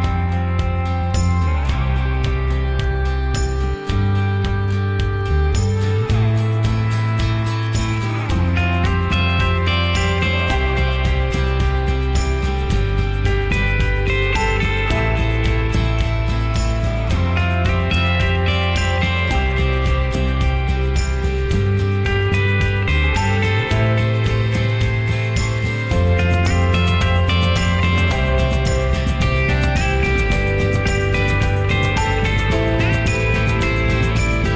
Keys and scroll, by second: 8.4 typing, 8.6 Return, 14.0-16.0 typing, 16.2 Return.